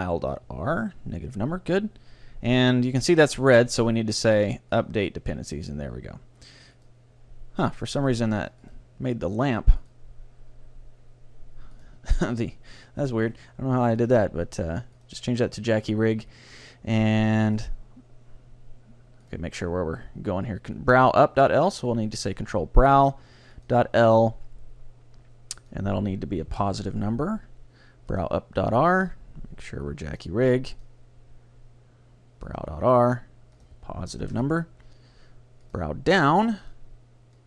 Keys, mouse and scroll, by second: 4.0 middle click, 4.7-6.5 drag, 6.8-11.6 drag, 11.8-13.6 drag, 14.0-15.8 drag, 17.6-21.1 drag, 21.5-23.3 drag, 25.6-27.5 drag, 28.1-32.7 drag, 33.6-35.5 drag, 35.7-37.4 drag.